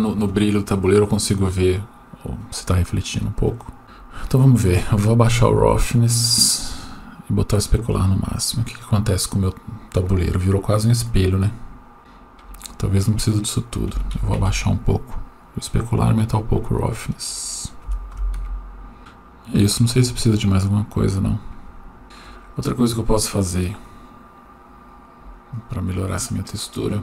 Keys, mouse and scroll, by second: 3.2 click, 3.8 right click, 5.0-6.8 drag, 7.4 click, 13.1-14.4 drag, 16.1 click, 17.1-18.4 drag, 19.1-20.3 drag, 22.0 shift+middle click, 23.3-24.1 right drag.